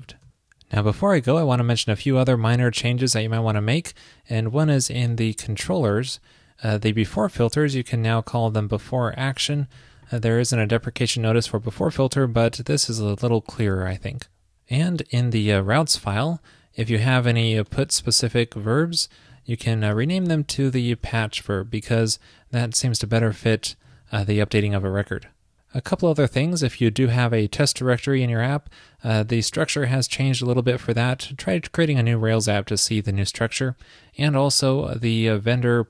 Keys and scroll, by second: 10.8 alt+shift+Left, 13.6 super+s, 20.9 alt+shift+Left, 24.0 super+Right, 24.2 super+s.